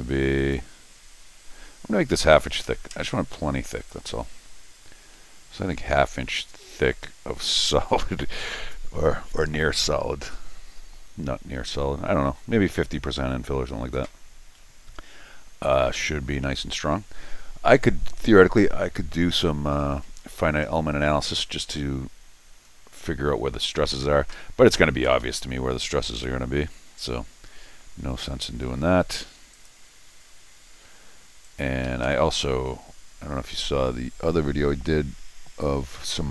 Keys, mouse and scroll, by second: 0.4 click, 20.7 scroll down 2, 21.3 scroll down 2, 21.5 scroll up 2, 22.2 scroll down 2, 22.6-23.0 scroll up 2, 23.2 middle click, 24.3 Escape, 25.2 Escape, 26.1 l, 29.5 click, 31.4 click, 31.9 Escape, 32.0 Escape.